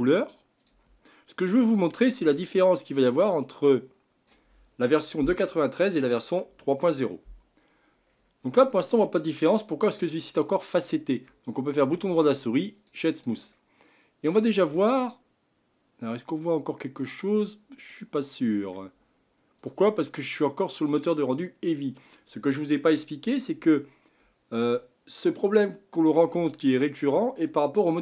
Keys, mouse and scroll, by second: 0.6 click, 1.7 click, 8.0 scroll up 6, 8.9-11.7 middle drag, 11.7-13.5 right drag, 13.5-17.3 middle drag, 19.6 click.